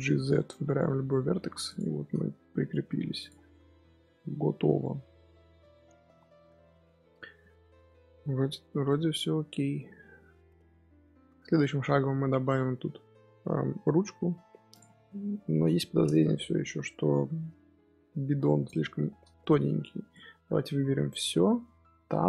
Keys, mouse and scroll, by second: 1.2 g, 2.1 scroll down 4, 2.3 Tab, 2.5-3.1 middle drag, 3.1 click, 3.4-5.1 middle drag, 5.1 scroll down 4, 5.2 scroll up 1, 5.2 scroll down 1, 5.4 scroll up 1, 5.7-6.4 middle drag, 6.4 scroll down 1, 6.6-8.3 middle drag, 8.3-8.8 scroll up 1, 8.8-14.6 middle drag, 14.6 click, 15.0-15.8 middle drag, 15.8-16.5 scroll down 1, 16.5 KP_1, 18.4 scroll down 1, 18.4 shift+middle drag, 18.6-19.6 scroll up 2, 19.6 z, 20.0 click, 22.1 Tab.